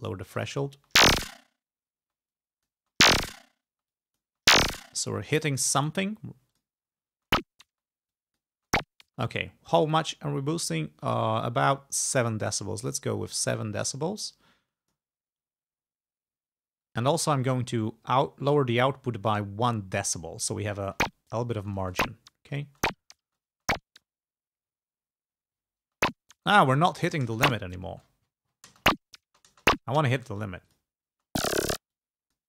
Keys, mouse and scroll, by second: 0.8 space, 2.1 space, 2.3 click, 2.9 space, 3.8 space, 3.9 click, 5.1 space, 5.7 click, 6.6 click, 7.3 space, 8.1 click, 8.6 space, 12.3-15.2 drag, 15.4-15.9 scroll up 2, 16.3 scroll down 2, 18.3 scroll down 2, 18.9 scroll down 2, 20.9 space, 21.7 space, 24.9-25.8 scroll down 4, 25.9 space, 26.5-27.3 scroll down 2, 27.3 space, 28.0 space, 28.1-28.7 scroll down 2, 28.7 space, 29.8 click, 30.4 space, 30.7 click, 31.2 space, 32.0 click.